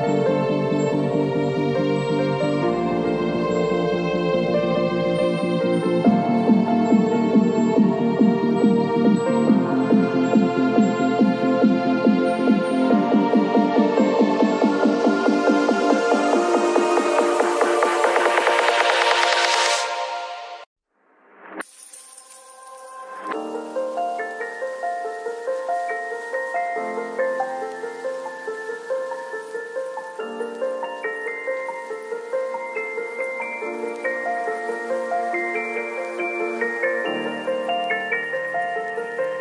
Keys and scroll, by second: 1.3 space, 7.4 b, 12.1 v, 15.2 v, 15.6 ctrl+a, 15.9 ctrl+c, 16.4 ctrl+w, 16.7 Return, 20.0 ctrl+v, 21.3 ctrl+[, 31.6 ctrl+l, 35.4 Return, 36.9 ctrl+t.